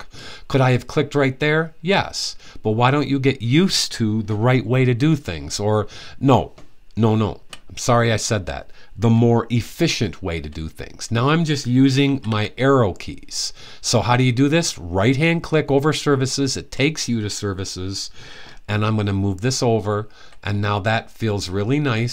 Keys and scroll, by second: 4.7 Right, 5.2 typing, 5.4 Right, 5.6 Right, 5.7 Right, 5.8 Right, 5.9 Right, 6.1 Right, 9.7 Right, 9.8 Right, 9.9 Right, 10.0 Right, 10.1 Right, 11.8 Left, 12.0 typing, 18.4-19.9 typing.